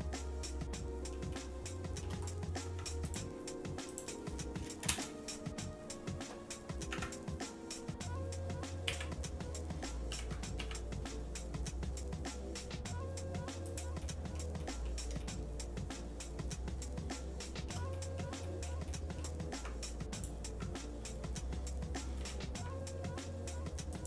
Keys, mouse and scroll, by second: 1.3 shift+middle click, 2.2 scroll down 2, 2.6 Tab, 3.1 click, 3.9-5.1 drag, 7.2 Tab, 8.9 a, 10.1 g, 14.0 middle click, 14.6 middle click, 15.2-17.7 shift+middle drag, 17.9 middle click, 18.4 middle click, 18.9 shift+middle click, 19.5 Tab, 20.2 click, 20.5 Tab, 22.2 g.